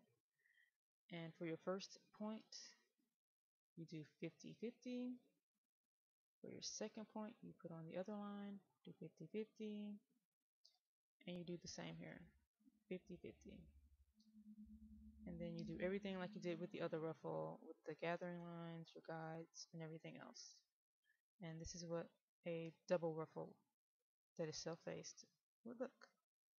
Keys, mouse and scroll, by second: 3.0 right click, 5.3 click, 8.2 right click, 10.2 click, 11.9 right click, 13.6 click, 14.6-15.2 scroll up 1, 15.2 middle click, 22.2-24.1 scroll down 1.